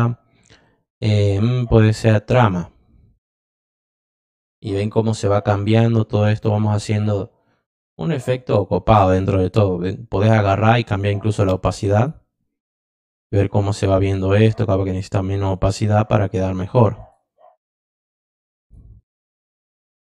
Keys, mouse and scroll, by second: 2.3 click, 6.8 drag, 7.8 click, 8.4 click, 11.2 click, 11.9 click, 12.8 click, 14.2 click, 15.5 click, 16.0 click, 16.4 click, 16.9 click, 18.1 click, 18.6 click, 20.0 click.